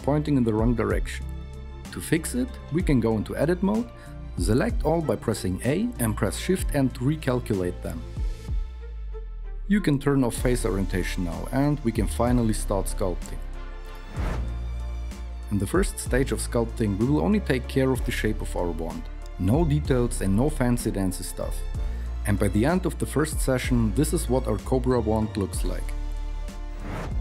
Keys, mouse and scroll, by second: 4.9 alt+n, 9.6 Tab, 12.8 n.